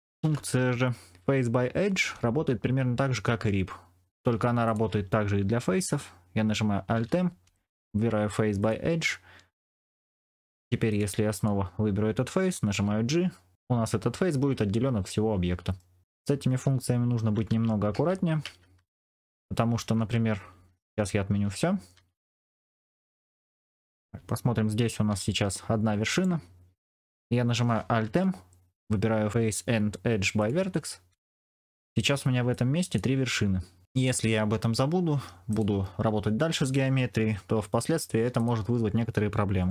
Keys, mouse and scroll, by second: 0.1 alt+m, 4.2 3, 6.8 alt+m, 9.8 middle click, 12.6 g, 13.5-15.8 middle drag, 17.4 ctrl+z, 17.8 ctrl+z, 18.3 ctrl+z, 18.7 ctrl+z, 19.0 ctrl+z, 19.9 ctrl+z, 20.3 ctrl+z, 20.6 ctrl+z, 20.8 ctrl+z, 21.9 ctrl+z, 25.0 g, 27.9 alt+m, 32.6 click, 37.8 3, 39.6 middle click.